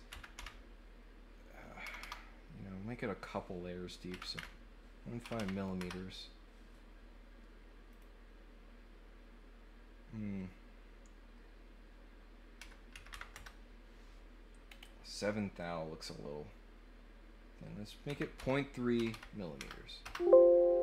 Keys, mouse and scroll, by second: 7.9 click, 14.6 middle click, 14.6 scroll down 2, 14.8 middle click.